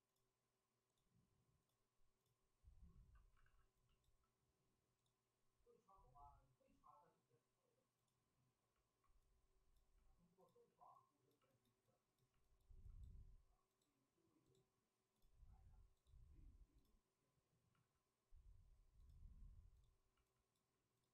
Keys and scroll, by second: 3.3 alt+s, 10.6 alt+s, 17.7 alt+s.